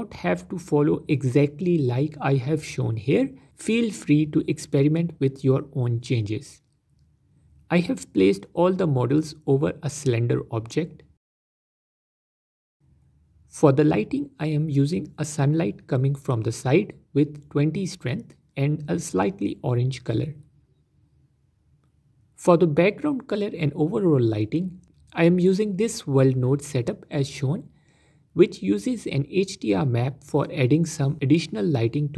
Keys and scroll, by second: 15.2 ctrl+z.